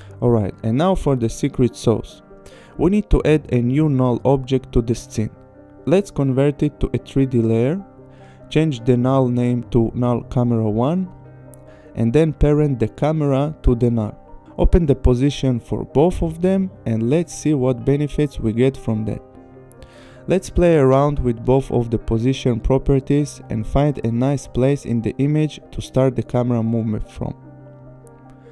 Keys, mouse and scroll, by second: 2.5 click, 4.8 click, 5.8 click, 6.0 Return, 6.3 click, 6.6-9.0 typing, 9.3 Return, 10.5 click, 12.1 click, 12.4 click, 14.2 shift+click, 14.8 p, 15.7 click, 18.4 click, 22.4 ctrl+z, 23.9 click, 25.9 click, 26.4 shift+click.